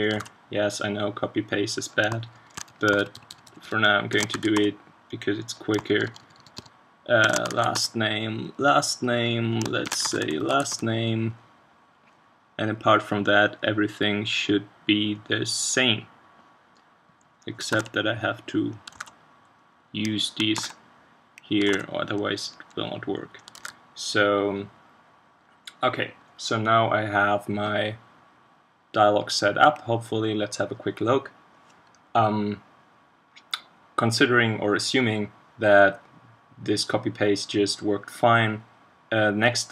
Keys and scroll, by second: 0.8 super+v, 17.7 super+c, 18.9 super+v, 20.7 super+c, 21.7 super+v, 23.7 super+s.